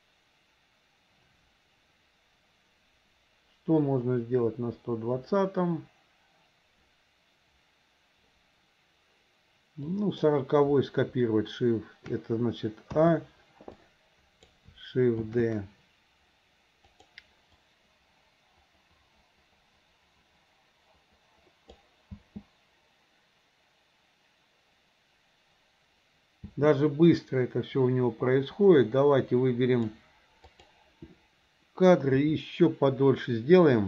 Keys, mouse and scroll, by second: 10.0 click, 13.0 a, 13.9 click, 15.3 shift+d, 17.7-21.8 drag, 26.8 space, 27.2-29.9 drag, 30.6 click.